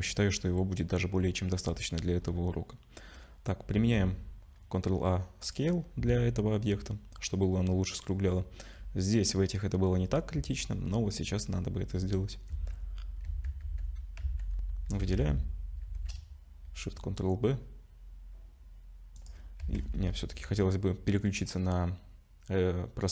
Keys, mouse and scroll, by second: 0.7-3.5 scroll up 10, 3.7 ctrl+a, 8.3-9.6 scroll down 4, 9.9 scroll down 2, 10.6-11.8 scroll up 3, 11.8-12.5 scroll up 2.